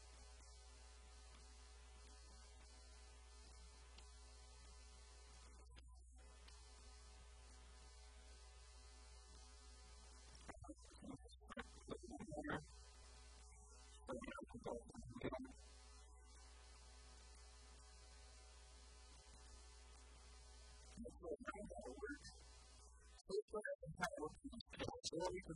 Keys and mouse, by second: 0.0-0.3 typing, 3.7 Tab, 4.7 Tab, 6.9 Tab, 7.3 Tab, 13.7 click, 18.3 click, 19.5 Tab, 22.3 Tab, 22.8 KP_1, 23.0 KP_3.